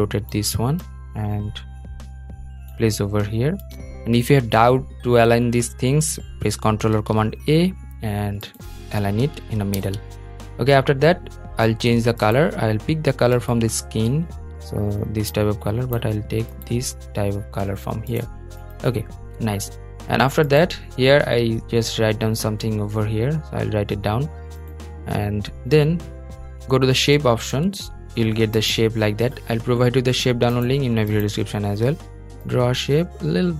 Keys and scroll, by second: 6.6 super+a, 9.5 super+d.